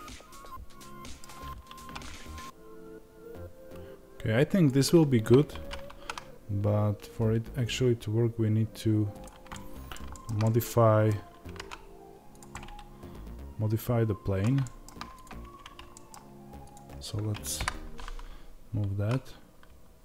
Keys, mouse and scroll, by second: 1.7 r, 9.1 click, 9.4-12.3 middle drag, 11.3 g, 12.3 click, 12.4-15.1 middle drag, 15.1 click, 15.3 Tab, 15.8 middle click, 16.6 click, 17.5 KP_7, 18.9 z.